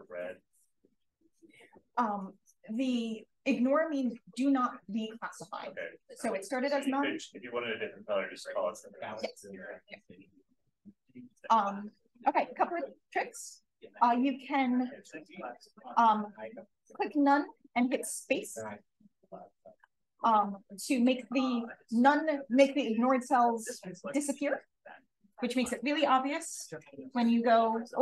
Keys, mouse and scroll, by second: 0.4 d, 13.2 click, 17.7 space, 26.7 click.